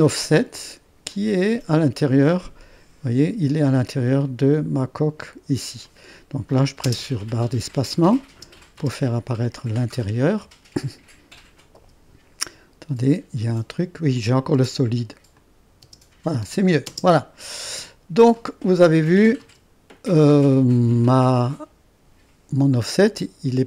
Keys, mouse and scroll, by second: 0.0-1.1 drag, 1.1-4.5 drag, 5.8-6.9 drag, 6.9 space, 8.3 space, 9.8 click, 10.8 click, 11.1-15.1 drag, 11.8 space, 14.5 space, 15.3-16.4 drag, 15.8 space, 16.4 space, 16.8 space, 17.7 space, 18.3 click, 19.2 click, 19.4 space, 20.4 space, 21.4 click.